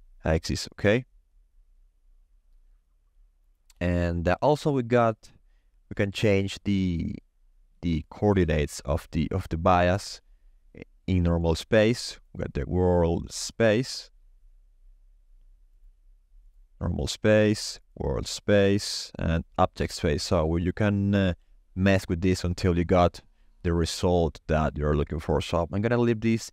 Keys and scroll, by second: 3.5 0, 3.7 Return.